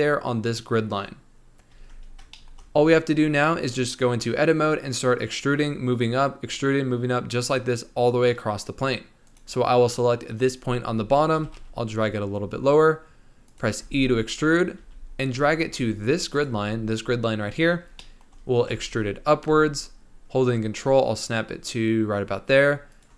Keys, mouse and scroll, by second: 1.7 Tab, 2.0-2.3 scroll down 2, 2.3-5.3 shift+middle drag, 9.2 click, 11.3 g, 13.8 e, 17.9 shift+middle click, 18.7 e.